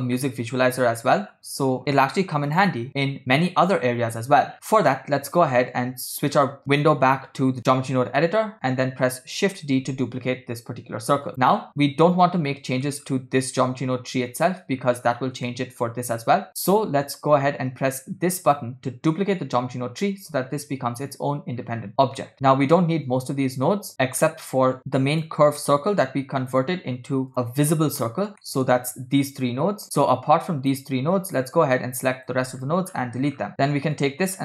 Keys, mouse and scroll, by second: 0.3-1.5 shift+middle drag, 2.5-3.2 drag, 4.2-4.9 scroll down 9, 4.6 shift+middle click, 4.6 scroll up 1, 6.6 click, 9.5 shift+d, 11.4 shift+middle click, 11.4 scroll down 1, 12.6 middle click, 13.1 scroll up 1, 14.7 scroll down 1, 15.6-16.0 shift+middle drag, 16.6 shift+middle drag, 18.4 click, 21.7-22.0 scroll down 3, 22.3 middle click, 22.5 middle click, 24.0 middle click, 24.2 scroll down 1, 25.2 click, 25.7 middle click, 26.5 click, 27.4 click, 28.3 scroll down 1, 28.5 middle click, 29.5 click, 30.0 click, 31.2 click, 32.0 click, 32.7-33.6 scroll down 7, 33.6-34.0 scroll up 3, 33.6 x, 34.0-34.4 drag.